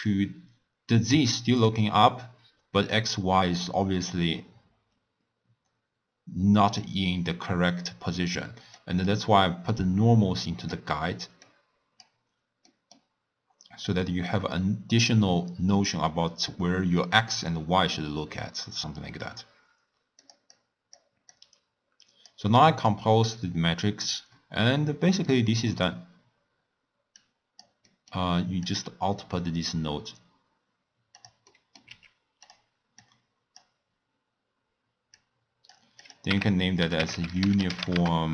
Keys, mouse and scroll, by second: 1.3-4.3 middle drag, 8.7 click, 9.7 click, 11.4 click, 12.6 middle click, 13.1-14.0 scroll down 3, 14.0-17.0 middle drag, 20.1 click, 20.5-21.3 drag, 23.6 scroll down 2, 24.3-27.1 middle drag, 27.1 click, 27.8 middle click, 28.6-31.3 drag, 31.5 middle click, 31.8 g, 33.0 click, 35.1 click, 36.0-38.3 drag.